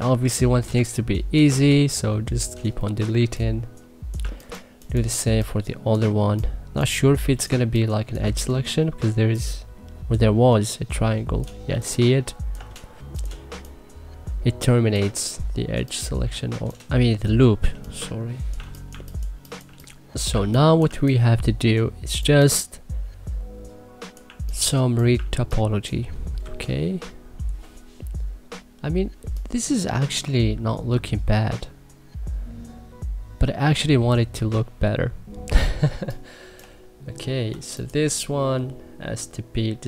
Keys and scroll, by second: 0.5 3, 2.8 Delete, 2.9 3, 4.0 1, 5.0 3, 11.4 3, 13.3 3, 17.2 Delete, 17.5 3, 18.3 1, 18.7 2, 20.1 1, 20.6 2, 22.0 3, 24.9 1, 26.2 c, 28.9 1, 35.6 2.